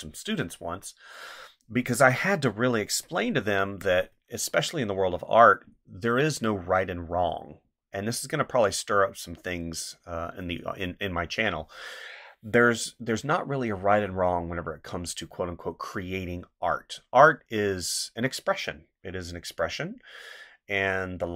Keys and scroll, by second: 3.6 space.